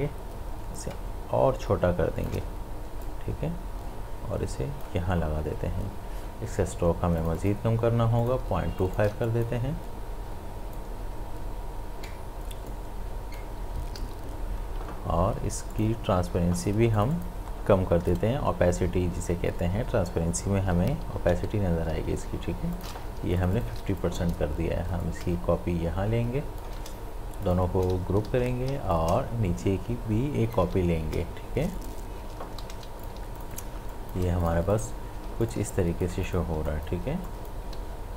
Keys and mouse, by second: 0.8-3.0 alt+drag, 3.0-7.1 drag, 7.2 click, 8.4 space, 8.8 ctrl+click, 9.1 ctrl+space, 9.2-14.0 drag, 14.0 ctrl+z, 15.7 click, 22.7 click, 23.2 space, 23.4 ctrl+alt+click, 23.8 ctrl+alt+space, 24.0 click, 25.0-27.4 alt+drag, 28.3 ctrl+g, 29.0-31.8 alt+drag, 32.6 ctrl+g, 33.0 click, 33.1 space, 33.4 ctrl+alt+click, 33.8 ctrl+alt+space, 33.9 click, 35.3 space, 35.4 ctrl+alt+click, 35.7 ctrl+click, 36.2 click, 36.6 space, 36.7 click, 37.8 ctrl+z.